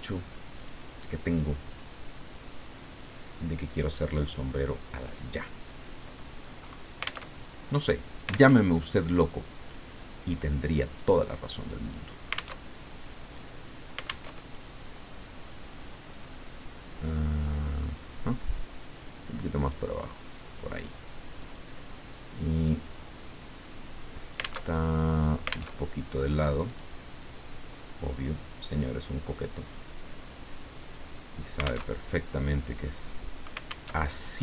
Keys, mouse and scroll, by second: 0.6 click, 1.3 click, 3.0-4.4 drag, 5.0 click, 7.3 alt+Tab, 8.5 alt+Tab, 11.9 click, 12.7 alt+Tab, 14.3 alt+Tab, 15.8-18.3 drag, 18.9-21.0 drag, 21.4 click, 22.6-24.6 drag, 24.6 alt+Tab, 25.7 alt+Tab, 26.7 click, 27.2 click, 28.7-31.9 drag, 31.9 alt+Tab, 33.9 alt+Tab.